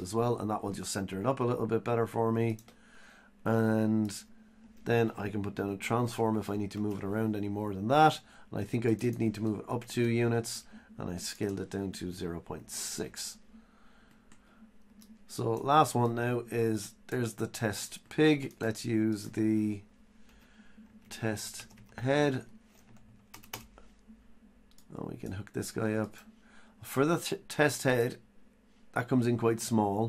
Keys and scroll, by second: 20.0 Delete, 20.3 Tab.